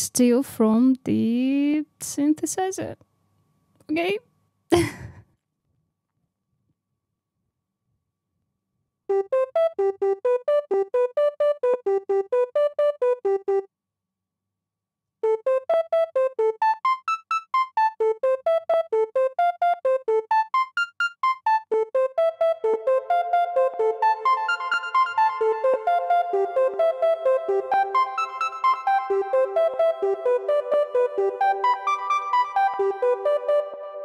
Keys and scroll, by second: 5.6 super+d, 6.0 Up, 6.1 space, 6.4 super+d, 7.2 Down, 7.9 super+d, 8.4 Down, 8.8 Down, 14.9 space, 21.6 space.